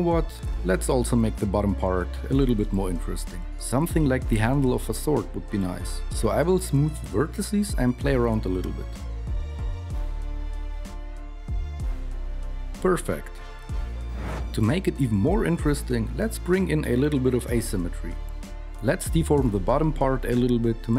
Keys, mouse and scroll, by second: 6.7 KP_1, 7.2 alt+KP_2, 7.4 ctrl+r, 7.8-12.3 typing, 9.6 ctrl+r, 9.9 alt+KP_1, 10.0 alt+KP_3, 10.9 alt+KP_2, 12.1 Tab, 15.7 g.